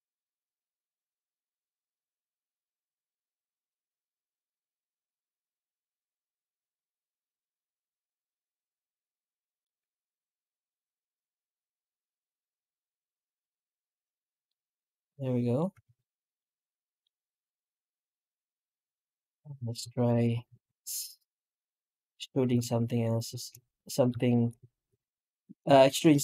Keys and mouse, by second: 14.3-15.4 middle drag, 15.4 middle click, 15.7 alt+a, 16.2-16.9 middle drag, 17.9-18.4 middle drag, 18.9 right click, 19.3 Tab, 19.8 shift+middle drag, 20.3 3, 21.1 right click, 21.9 right click, 23.0 ctrl+shift+right click, 23.6-24.0 middle drag, 24.1 shift+middle drag, 24.6 alt+middle click, 25.0 middle drag, 25.3 middle click, 25.6 shift+middle drag.